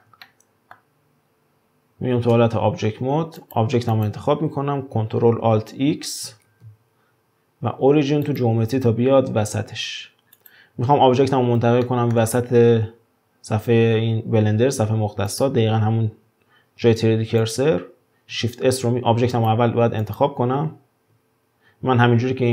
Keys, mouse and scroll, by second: 2.3 Tab, 3.4 drag, 3.9 click, 5.6 ctrl+alt+x, 6.5 ctrl+alt+x, 9.8-10.4 scroll down 2, 10.4 click, 11.8-14.8 shift+middle drag, 15.3 click, 17.4 click, 18.7 shift+s, 20.0 click.